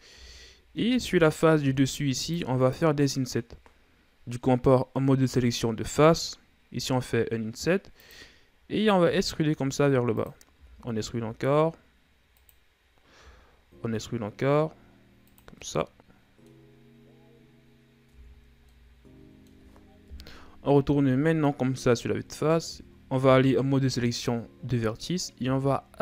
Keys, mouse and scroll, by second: 0.1 middle click, 0.6 Tab, 1.1-1.4 scroll up 2, 1.4 Tab, 2.1 ctrl+Tab, 3.1 right click, 9.6 e, 11.1 e, 16.1 middle click, 17.1-17.8 scroll up 2, 17.9-18.4 scroll down 2, 18.5-19.2 scroll down 3, 18.6 Tab, 19.2-20.5 middle drag, 20.5 KP_1, 22.3-22.8 scroll up 3, 22.8 Tab, 23.7 ctrl+Tab, 25.9 z.